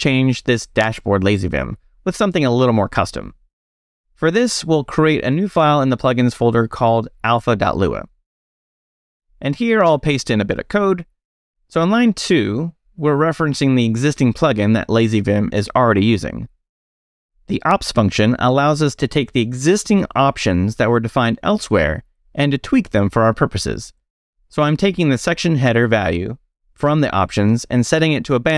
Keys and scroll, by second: 2.1 space, 2.2 e, 3.1 j, 3.6 Return, 4.0 j, 4.6 Return, 5.9-8.0 typing, 8.1 Return, 8.7 Return, 9.8 space, 9.9 e, 10.6 i, 11.2 Escape.